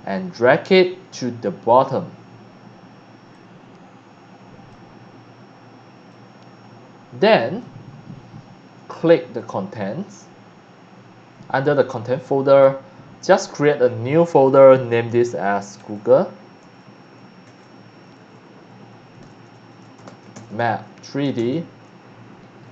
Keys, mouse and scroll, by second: 1.2-1.9 drag, 3.3-4.7 drag, 6.1 click, 6.6 click, 6.8 click, 7.3 click, 9.3 click, 12.4 right click, 13.6 click, 15.6-17.7 typing, 19.1-21.1 typing, 22.6-22.7 typing.